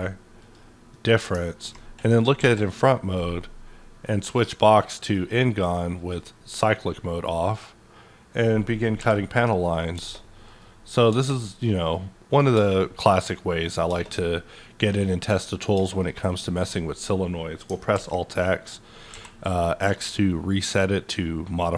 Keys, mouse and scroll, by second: 0.4 q, 0.9-4.8 middle drag, 2.4 KP_5, 4.8 click, 5.0 click, 5.8 click, 6.4 click, 7.5-9.9 drag, 9.0 t, 9.9 space, 10.6-13.2 drag, 11.1 space, 12.5 space, 13.2-15.0 drag, 13.9 space, 15.3-16.3 drag, 15.7 space, 16.6-19.1 middle drag, 17.9 alt+x.